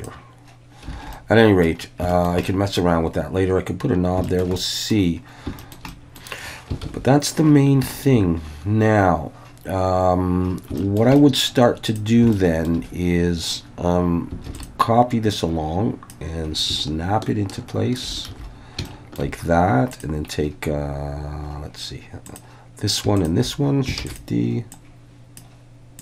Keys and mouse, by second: 0.0 click, 0.9 alt+a, 1.1-1.6 middle drag, 2.1 shift+middle drag, 2.4-2.8 middle drag, 4.2 shift+middle click, 4.6 middle click, 5.6 shift+middle click, 5.9 middle drag, 6.8 ctrl+s, 7.9 shift+middle click, 10.8 shift+middle drag, 11.1 middle click, 12.3-12.7 shift+middle drag, 14.5 shift+d, 14.5 click, 15.3 click, 16.6-18.0 ctrl+drag, 18.3 alt+a, 18.9 shift+middle drag, 22.3 click, 24.0 shift+d, 24.1-25.4 drag.